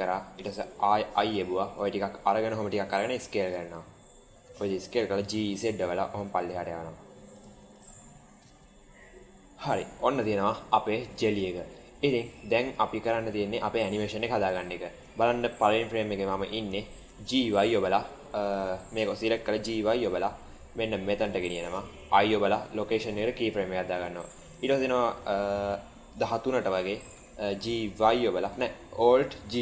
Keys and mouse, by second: 2.9 s, 5.0 g, 7.5 Tab, 8.0-9.6 middle drag, 10.0-11.2 middle drag, 11.7-12.2 middle drag, 14.5 shift+middle click, 16.3-16.6 middle drag, 16.7 shift+middle click, 17.2 g, 17.5 y, 18.4 click, 19.2 g, 22.0 i, 24.6 click, 25.2 click, 27.4 g, 29.5 alt+g.